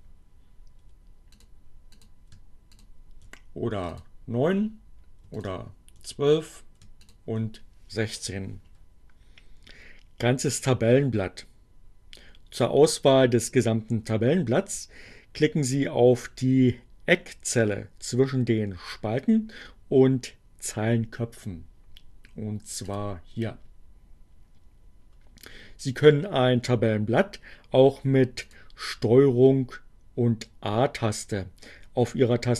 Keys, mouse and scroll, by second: 1.1 click, 2.0 click, 2.5 ctrl+click, 3.7 ctrl+click, 5.3 ctrl+click, 6.1 ctrl+click, 22.7 click, 26.7 click.